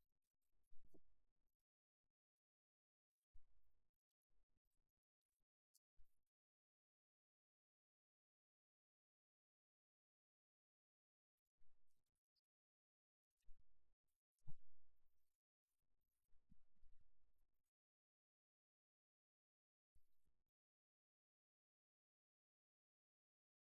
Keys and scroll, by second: 3.3 super+j.